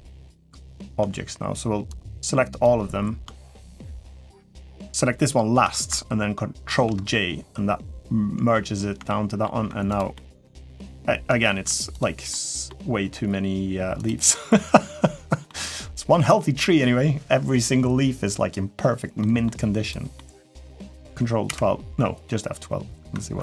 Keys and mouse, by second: 0.4 shift+middle drag, 1.8-2.4 drag, 3.5 shift+click, 4.0 shift+click, 6.5 ctrl+j, 8.9-9.2 middle drag, 9.9-10.4 middle drag, 11.2 shift+middle drag, 12.1-12.4 middle drag, 13.8 click, 14.3-15.3 middle drag, 15.9-16.4 middle drag, 19.0 middle drag, 19.9 middle drag.